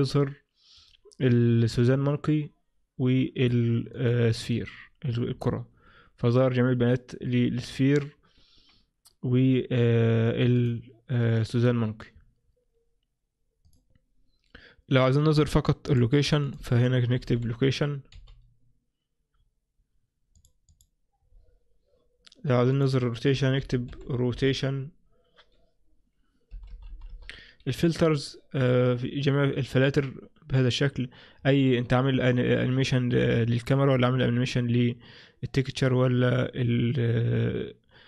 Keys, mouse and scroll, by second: 4.0 click, 4.6 right click, 10.6 click, 11.3 right click, 16.0 click, 16.5 click, 20.8 click, 21.5-22.8 scroll down 1, 22.8 click, 22.8-23.8 scroll down 2, 26.8 BackSpace, 27.2 BackSpace, 28.2 click, 29.0-30.2 scroll down 7.